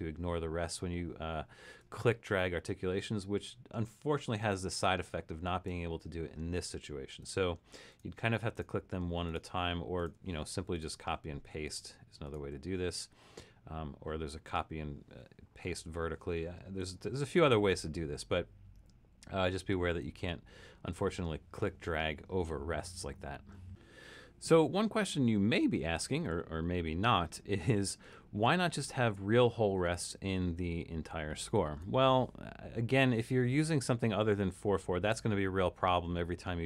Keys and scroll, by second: 1.8 super+z, 4.8-5.8 typing, 7.1-10.1 typing, 10.3 Escape, 17.0 super+-, 17.7 super+-, 18.8 super+-, 24.8 super+=, 26.1 super+=, 31.6 super+=.